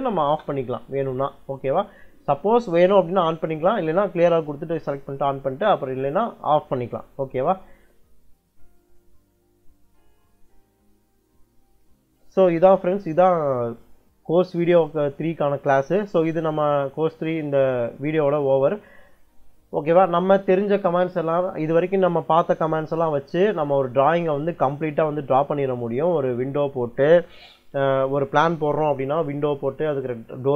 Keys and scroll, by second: 0.0-0.5 typing.